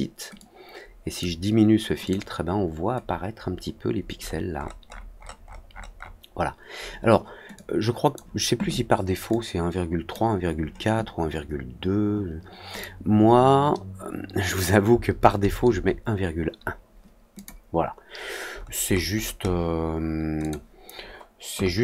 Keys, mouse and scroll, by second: 0.3-1.1 drag, 2.0 click, 4.2 middle click, 4.5 middle click, 4.8 middle click, 5.1 middle click, 5.4 middle click, 5.6 middle click, 7.5 click, 9.2 click, 12.7 click, 17.3 click, 18.0 middle click, 18.4 middle click, 18.8 middle click, 19.1 middle click, 19.4 middle click, 20.3 click.